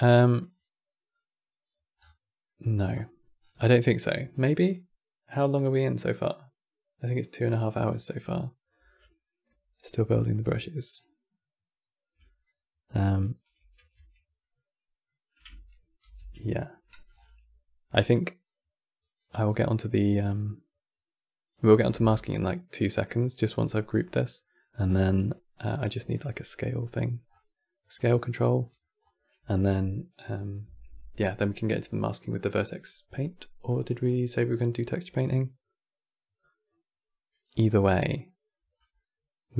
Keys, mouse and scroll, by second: 0.8 click, 1.7-2.2 scroll down 7, 2.2-2.6 middle drag, 2.6-3.3 scroll down 9, 10.7 click, 12.1 shift+click, 13.7 b, 14.7-15.8 middle drag, 15.8 ctrl+g, 16.5 middle click, 16.8-17.2 scroll up 11, 18.2-18.9 drag, 19.3 click, 23.2 middle click, 23.6 scroll up 8, 24.1 middle click, 24.6 scroll down 5, 24.8-26.3 middle drag, 26.3 scroll down 1, 26.5 middle click, 27.0 scroll up 5, 27.7 click, 28.3 middle click, 28.7 scroll up 2, 37.2-37.5 middle drag, 37.5 scroll up 6, 37.9 middle click, 38.5 scroll down 3, 38.6-39.5 middle drag.